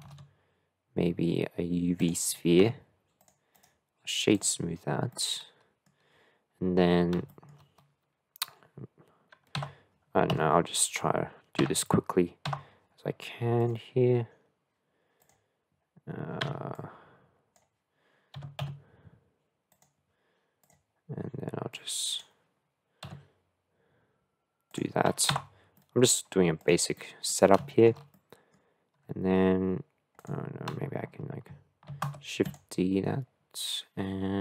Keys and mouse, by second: 0.1 shift+a, 2.6 s, 3.6-5.1 drag, 5.1-5.9 middle drag, 7.3 shift+middle click, 9.6 Tab, 10.4 KP_1, 11.6 Tab, 12.5 Tab, 13.7 click, 15.2 click, 16.5 1, 16.7 click, 18.4 g, 20.6 click, 21.9 click, 23.1 s, 25.3 Tab, 25.7 middle drag, 26.6 click, 26.9-27.3 middle drag, 27.6 shift+middle drag, 28.2 middle click, 31.9 shift+d.